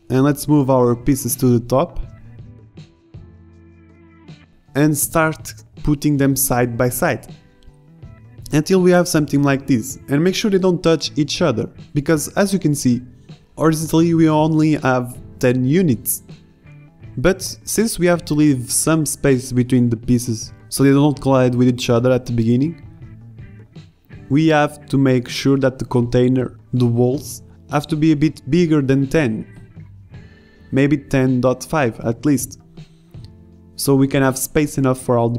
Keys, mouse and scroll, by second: 0.7 Tab, 0.9-2.3 typing, 6.9 drag, 7.4 click, 7.8 click, 8.2 click, 8.4 right click, 8.9 right drag, 9.1 middle drag, 10.8 middle click, 11.4 Tab, 11.7 right drag, 12.5 ctrl+z, 14.1-14.8 right drag, 14.9 middle click, 15.2-15.7 right drag, 16.0 right click, 16.3 middle click, 16.9 r, 18.0 g, 19.7 middle click, 21.2-21.6 drag, 21.3 shift+d, 22.3 click, 24.3 g, 25.1 a, 28.7 KP_7, 32.2 Tab.